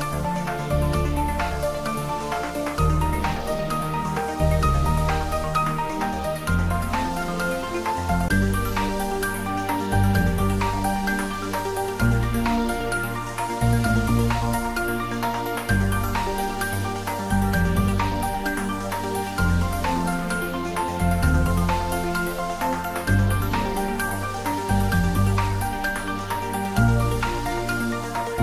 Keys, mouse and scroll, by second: 0.7 click, 3.2 scroll down 1, 9.6 scroll down 1, 10.2-14.3 middle drag, 20.2 click, 21.5 scroll down 1, 22.5 scroll up 1, 23.5 `, 24.0 3, 26.0 click, 27.1 scroll up 1.